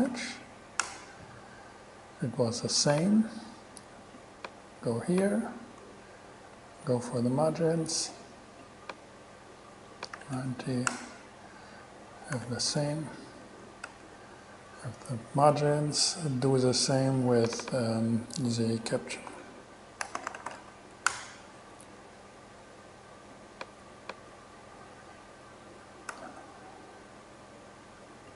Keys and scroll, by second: 0.0-0.8 typing, 1.0 Return, 6.8 shift+super+e, 10.4 9, 11.1 Return, 12.6 BackSpace, 13.8 shift+BackSpace, 14.1 shift+super+e, 19.1-21.1 typing, 21.3 Return, 26.3 shift+super+e.